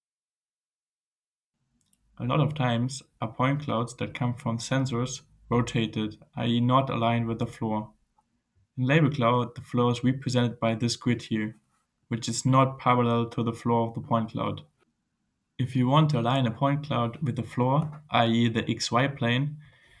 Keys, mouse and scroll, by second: 0.4 click, 1.6 scroll down 2, 4.2 click, 6.3 right click, 8.6-9.8 scroll up 5, 18.5-18.8 scroll up 2.